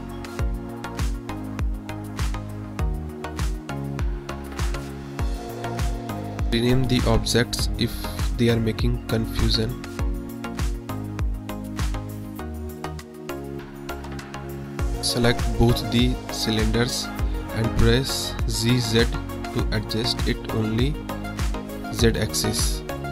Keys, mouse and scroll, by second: 0.1 click, 0.8-1.8 drag, 1.9-3.3 drag, 4.9 middle click, 5.6 click, 6.5 click, 6.6 middle click, 7.4 click, 8.0 click, 8.1-9.4 shift+drag, 10.6 click, 11.2 click, 11.7 KP_Decimal, 12.3 click, 12.7-14.3 shift+drag, 13.8 BackSpace, 15.0 KP_1, 17.6 drag.